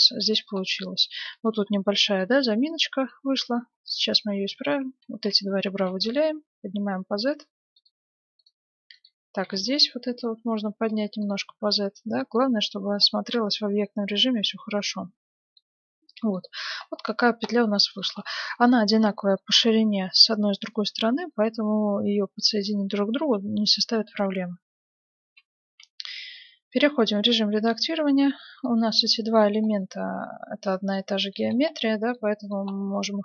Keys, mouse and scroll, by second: 1.2 Tab, 2.6-3.7 right drag, 3.5 z, 5.1 z, 5.2 middle click, 5.6 right click, 5.7 g, 8.4-10.9 right drag, 9.4 g, 11.2-14.7 middle drag, 11.4 Tab, 15.9-16.3 scroll up 1, 16.3-22.5 middle drag, 25.2 F9, 27.1 Tab, 28.8 middle click, 30.6-33.2 middle drag.